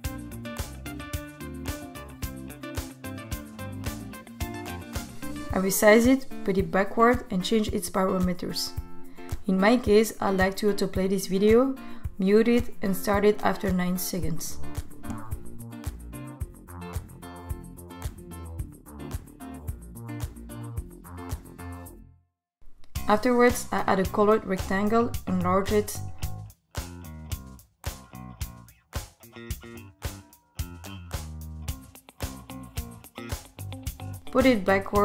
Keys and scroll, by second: 1.9 super+v, 23.2 r, 34.6 super+Down.